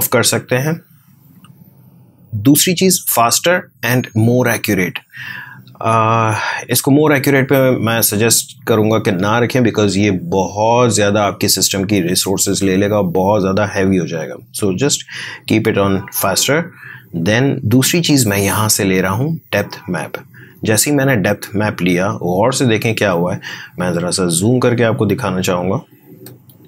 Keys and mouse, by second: 17.1 click, 19.9 click, 24.4 click.